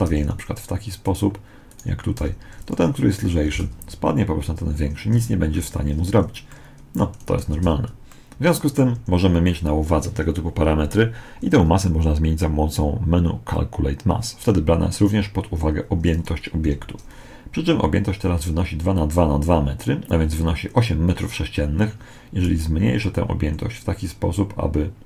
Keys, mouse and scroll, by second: 1.6-3.3 right drag, 2.1 g, 3.4 alt+a, 5.0 Escape, 5.4-9.7 middle drag, 7.4 alt+a, 8.9 Escape, 16.5 n, 22.3 s.